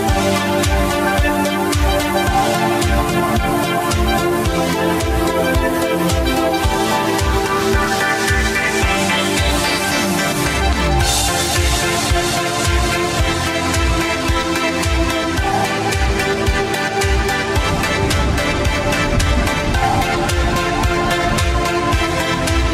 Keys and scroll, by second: 1.3 ctrl+z, 3.1 q, 8.1 q, 21.1 ctrl+z.